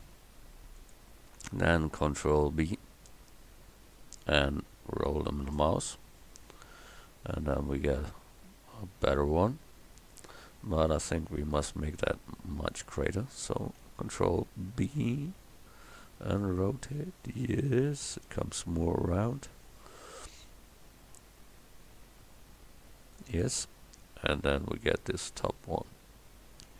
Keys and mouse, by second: 2.1 ctrl+b, 11.7 s, 13.8 ctrl+b.